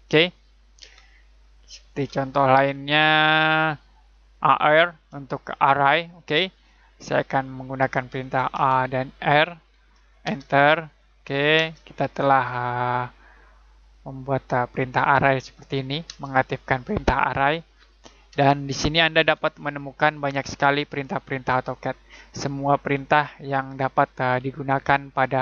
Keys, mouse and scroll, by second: 0.8 Tab, 1.9 click, 4.3 click, 7.0 scroll down 1, 7.4 middle click.